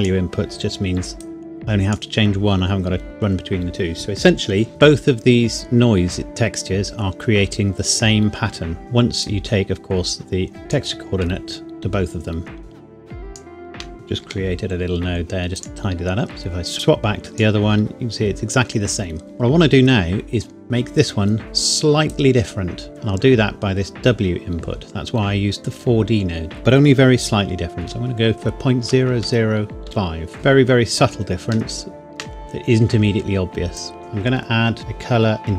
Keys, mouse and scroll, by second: 6.3 click, 9.2 click, 12.6 shift+right click, 14.2 g, 15.6 click, 22.1 click, 26.5 click, 27.8 KP_Decimal, 28.8 KP_0, 29.9 KP_5, 30.3 KP_Enter, 31.7 shift+middle click, 33.8 click.